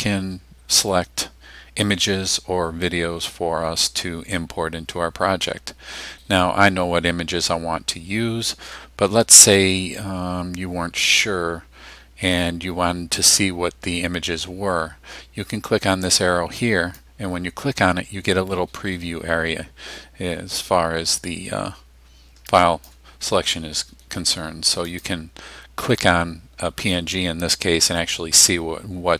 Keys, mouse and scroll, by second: 16.6 click, 21.2-23.1 drag, 24.9 click.